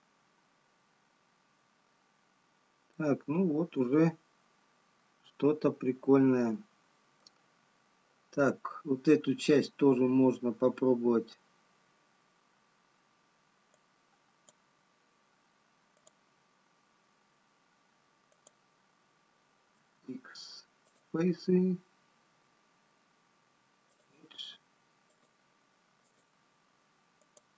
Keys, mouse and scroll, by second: 1.0 scroll down 2, 3.0 middle click, 8.4-11.8 scroll up 3, 14.6 click, 18.9 click, 20.9 x, 22.6 x, 25.1 click, 26.3 click.